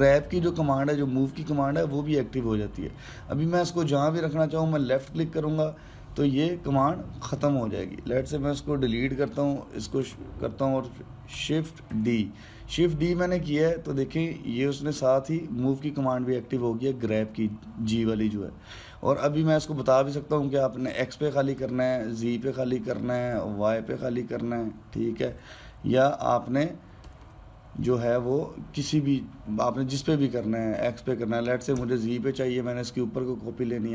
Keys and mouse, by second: 9.6 Delete, 10.8 click, 12.7 shift+d.